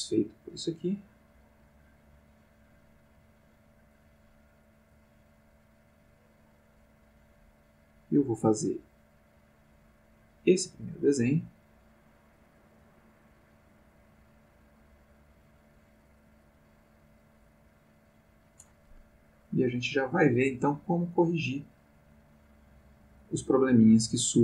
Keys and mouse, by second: 4.9-18.5 drag, 19.7-24.4 drag.